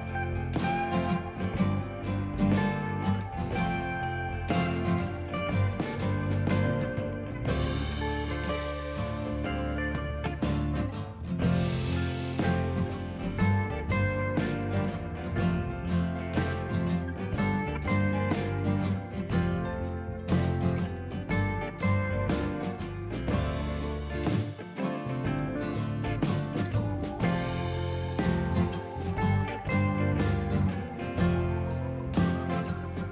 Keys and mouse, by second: 1.1 click, 2.3 click, 3.0 s, 4.2 click, 5.5 right click, 5.8 click, 7.1 click, 8.6 click, 8.9 ctrl+click, 9.1 click, 10.6 click, 12.1 click, 12.4 right click, 12.6 click, 12.9 y, 13.1 click, 13.7 click, 14.0 ctrl+shift+a, 14.1 click, 14.7 Delete, 14.9 click, 19.2 click, 19.9 click, 27.7 right click, 27.9 click, 31.1 a, 31.2 click, 31.8 click, 32.3-33.1 typing, 32.9 click.